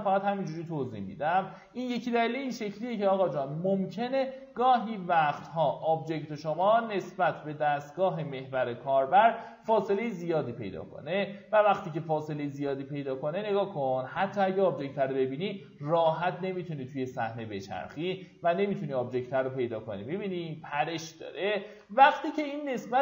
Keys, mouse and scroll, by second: 1.0 click, 2.5 KP_9, 4.3 Tab, 4.8 KP_9, 6.9 Tab, 7.8 middle click, 9.6 z, 10.5-11.6 scroll down 1, 11.6 typing, 11.9 click, 12.4 scroll up 1, 14.3-15.5 alt+middle drag, 16.0 alt+z, 16.6 alt+middle click, 17.7 alt+z, 18.6-21.3 alt+middle drag, 21.8 alt+z.